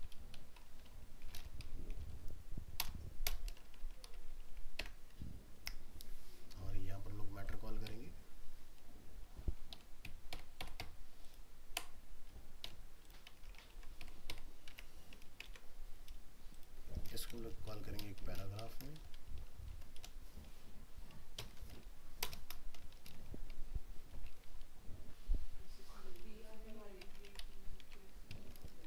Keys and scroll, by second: 13.4 ctrl+a, 13.7 ctrl+c, 14.8 alt+Tab, 15.5 ctrl+v, 27.2 ctrl+c, 27.8 ctrl+v.